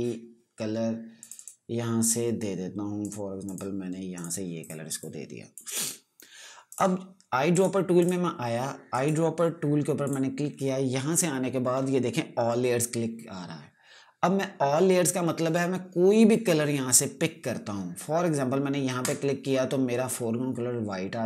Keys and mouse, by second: 1.7 click, 8.1 right click, 8.5 click, 9.4 right click, 10.6 click, 19.5 click.